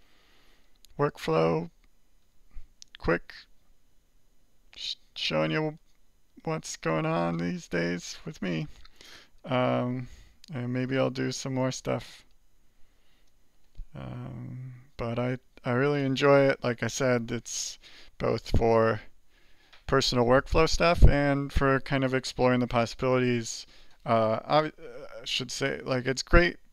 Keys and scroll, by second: 0.4 alt+2, 1.1 alt+1, 5.5 alt+3, 6.0 alt+4, 7.0 alt+5, 9.3 alt+6, 10.4 alt+7, 12.2 alt+6.